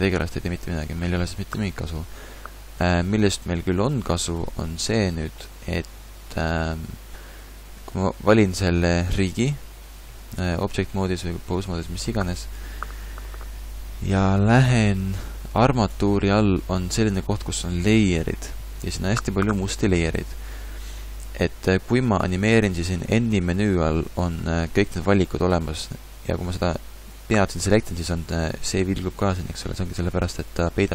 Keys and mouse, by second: 6.2 a, 9.6 ctrl+Tab, 15.9-21.1 drag, 21.1-22.5 middle drag, 22.5 n.